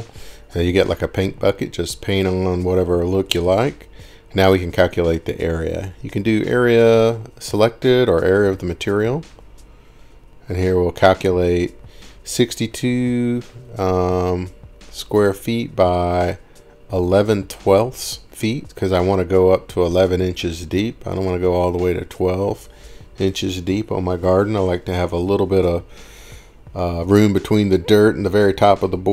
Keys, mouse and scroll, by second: 0.0 click, 0.2 ctrl+shift+r, 0.5 right click, 3.4 click, 7.0 click, 8.5 click, 9.1 click, 10.3 click, 11.7 click, 11.9 click, 12.8 click, 13.7 click, 14.3 click, 14.9 click, 18.9 click, 20.9 click, 21.7-24.5 typing, 24.7 Return, 28.0 typing.